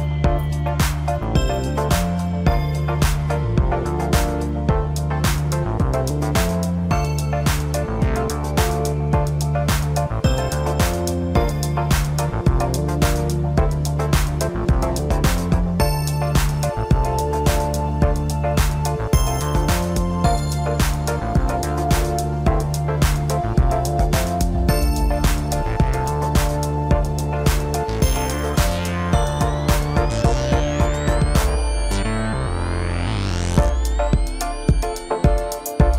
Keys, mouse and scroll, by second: 1.5 click, 2.3 click, 12.2-12.5 drag, 12.9-13.9 drag, 17.6-20.5 drag, 21.9 click, 27.5 drag, 28.2-29.3 drag, 31.9-33.1 drag, 33.6-35.6 drag.